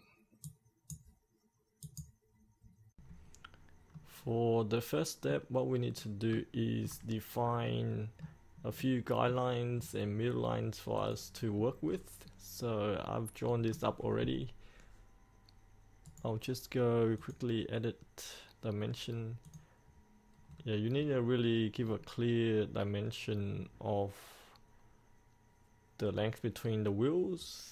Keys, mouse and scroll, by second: 4.0-5.5 middle drag, 6.0 scroll up 1, 6.6 shift+middle click, 7.2-7.7 scroll up 1, 7.7 middle click, 9.8-11.0 scroll down 1, 11.0 click, 11.6-11.9 scroll down 1, 11.9-13.7 scroll up 1, 16.1 right click, 17.2 click, 20.6-21.9 scroll down 1.